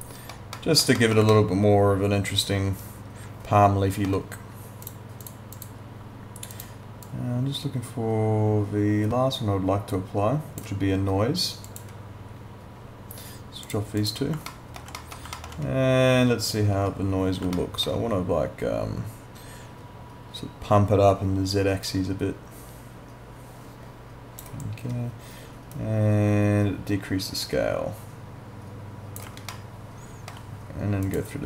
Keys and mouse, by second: 1.3 alt+middle click, 4.8 click, 11.7 click, 14.5 alt+middle click, 15.4 alt+middle click, 17.6 alt+middle click, 21.8 click, 25.7 click, 29.5 alt+middle click, 31.1 click.